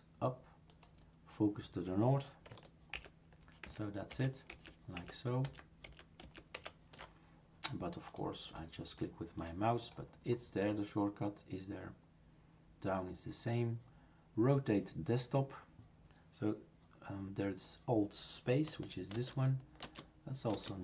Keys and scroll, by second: 2.9 ctrl+alt+Up, 4.5 ctrl+alt+Right, 19.1 alt+space.